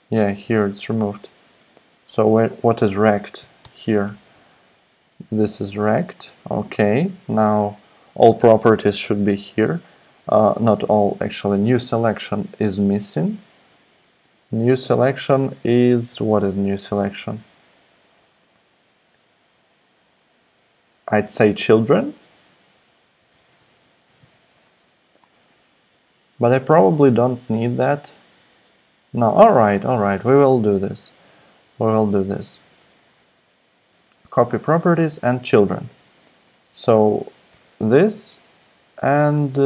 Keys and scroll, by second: 2.1 Left, 2.8-4.1 typing, 16.1 ,, 16.2 space, 22.9-24.8 typing, 25.1 Escape, 37.5 Left.